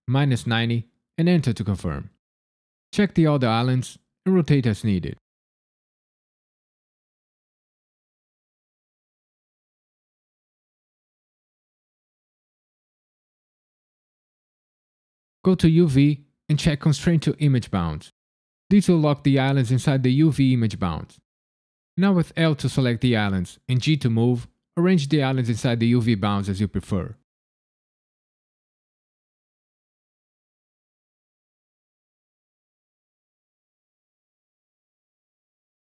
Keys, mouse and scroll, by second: 0.0 KP_Subtract, 0.3 KP_9, 0.4 KP_0, 1.1 KP_Enter, 2.4 click, 2.8 click, 3.1 click, 3.6 click, 4.7 l, 5.2 r, 5.4 KP_9, 5.5 KP_0, 5.7 KP_Enter, 7.0 click, 7.5 click, 8.5 l, 9.4 r, 9.9 KP_9, 10.1 KP_Enter, 11.2 click, 11.8 click, 12.6 l, 13.5 r, 13.7 KP_Subtract, 13.8 KP_9, 14.2 KP_Enter, 15.4 click, 21.0 click, 22.3 l, 23.8 g, 24.5 click, 25.1 n, 26.0 click, 27.5 click, 28.2 l, 29.0 g, 29.6 click, 30.5 click, 32.3 click, 32.8 l, 33.6 g, 34.2 click, 35.0 click.